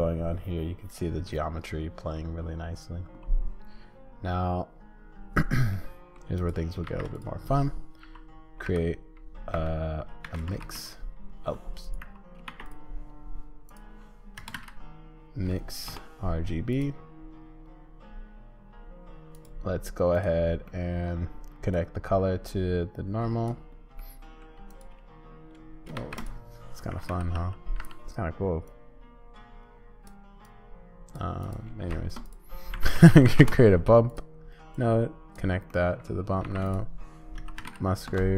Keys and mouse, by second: 5.7 middle click, 6.3 click, 6.8 shift+a, 10.2 shift+a, 12.0 x, 12.4 shift+a, 20.1 click, 20.7 click, 21.7-23.5 drag, 24.0 middle click, 25.9 shift+a, 29.0-31.1 drag, 31.8 shift+a, 34.7 click, 35.7 click, 36.4 shift+a.